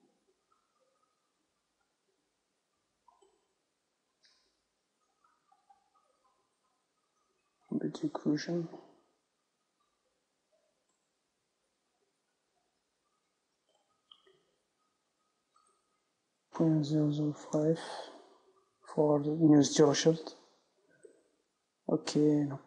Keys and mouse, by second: 3.7-10.7 drag, 14.4-18.1 drag.